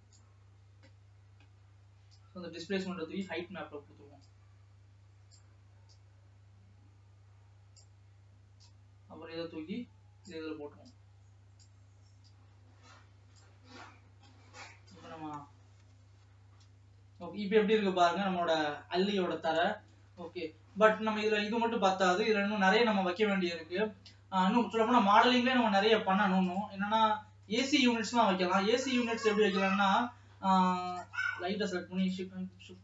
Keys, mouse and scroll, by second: 0.3-3.8 drag, 5.3 click, 10.8 click, 12.9 click, 14.3-14.6 scroll down 2, 15.3 KP_0, 18.6-19.0 scroll down 2, 20.6 ctrl+s, 26.1-27.0 scroll down 1, 27.0 click, 27.1 middle click, 27.7-28.1 scroll up 5, 28.1-29.1 shift+middle drag, 29.1-30.0 scroll down 1, 30.0-31.2 scroll down 1, 31.2 click, 32.1 shift+s, 32.6 alt+a.